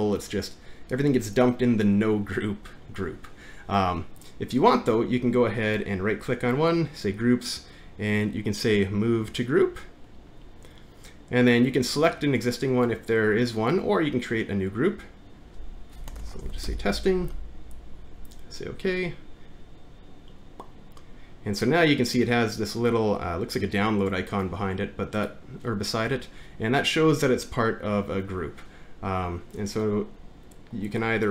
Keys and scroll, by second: 15.9-17.2 typing.